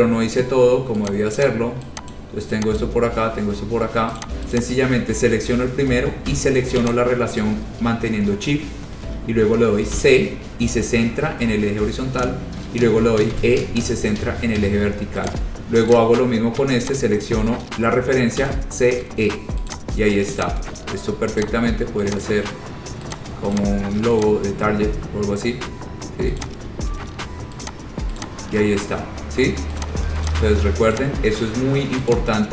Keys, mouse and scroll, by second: 1.2 click, 1.6 click, 2.3 click, 3.0 click, 3.2 shift+click, 3.3 scroll down 4, 3.5 scroll, 4.4 click, 4.7 click, 7.1 shift+click, 7.3 shift+click, 10.1 c, 13.5 e, 15.4 click, 16.1 click, 17.0 shift+click, 17.2 shift+click, 17.3-19.1 typing, 19.9 click, 20.6 click, 20.6 space, 21.6 click, 21.8 shift+click, 22.3 click, 22.5 shift+click, 23.4 click, 23.7 click, 24.4 click, 26.6 click, 27.8 click, 28.4 click, 28.9-29.3 scroll, 30.0 click, 30.5 shift+click, 30.7 shift+click, 31.2 click, 31.2 scroll down 3, 31.4 scroll down 3, 31.6 scroll up 2, 32.1 middle click, 32.3 click.